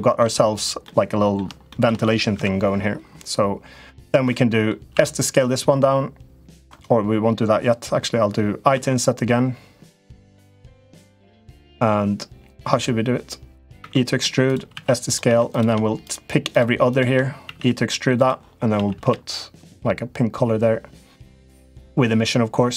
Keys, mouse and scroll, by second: 0.6 middle click, 1.6 shift+middle click, 2.1 KP_Decimal, 4.2 middle click, 4.7 s, 8.5 i, 13.5 e, 14.5 s, 15.2 click, 16.3 shift+click, 16.6 shift+click, 17.9 3, 17.9 e, 18.5 a, 18.8 g.